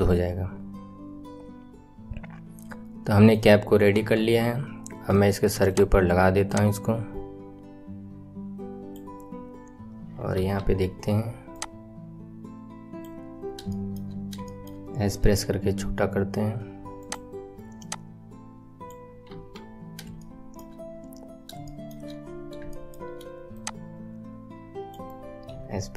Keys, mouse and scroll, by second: 3.9 KP_1, 4.1-5.0 scroll down 5, 5.2-5.6 shift+middle drag, 5.6 click, 6.4 click, 10.3 KP_3, 11.5 click, 13.2-13.6 scroll up 5, 13.6-14.1 shift+middle drag, 14.1-14.4 scroll up 1, 14.4-15.1 shift+middle drag, 15.1 s, 17.7 click, 19.2 KP_1, 19.7-20.0 scroll down 3, 20.1-21.3 shift+middle drag, 21.3 scroll up 3, 21.6 shift+middle click, 21.8-23.5 shift+middle drag, 23.5 click, 25.5 s.